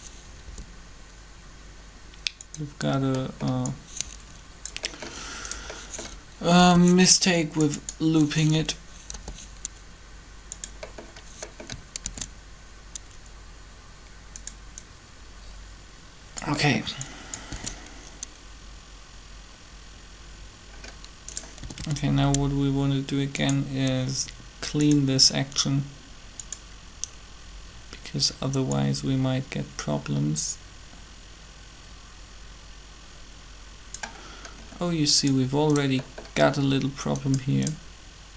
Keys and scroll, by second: 0.4 g, 6.5 b, 9.1 g, 12.0 shift+d, 17.5 alt+a, 21.6 typing.